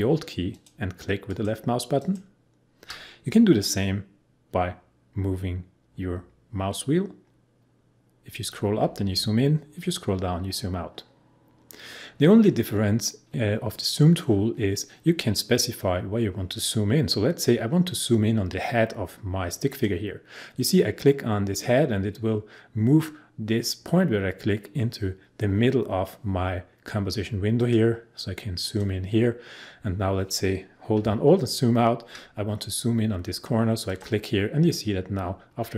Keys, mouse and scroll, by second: 5.1 scroll up 1, 9.2-12.0 scroll down 1, 19.6 click, 27.6 click, 31.4 alt+click, 33.8 alt+click.